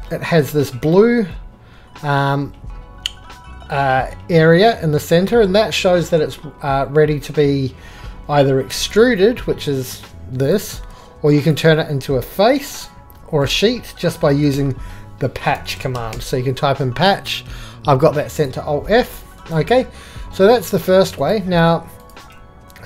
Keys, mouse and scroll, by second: 0.5-2.9 drag, 8.7 3, 9.9-10.7 drag, 10.7 Escape, 12.9 click, 13.2-14.5 drag, 15.4 p, 16.1 h, 18.3-18.9 drag, 19.0 click, 19.4-20.6 drag, 22.1 click, 22.2 x.